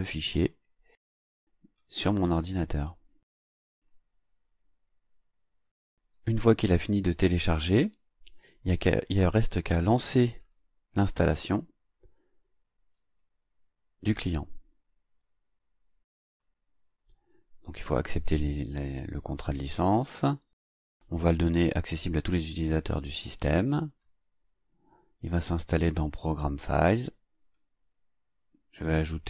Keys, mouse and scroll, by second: 0.1 click, 2.4 click, 3.8 click, 6.2 click, 10.4 click, 13.0 click, 16.3 click, 17.9 click, 19.4 click, 23.9 click, 27.5 click.